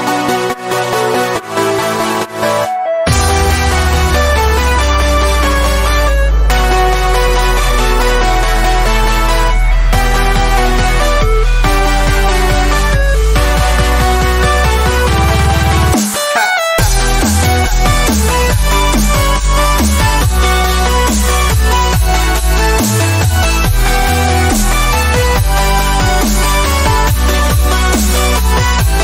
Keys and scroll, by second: 16.8 ctrl+alt+shift+e.